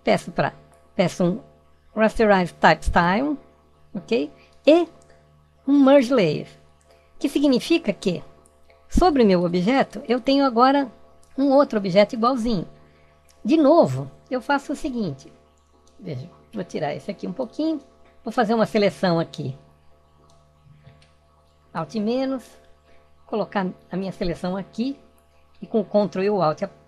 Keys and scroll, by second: 21.2 alt+-.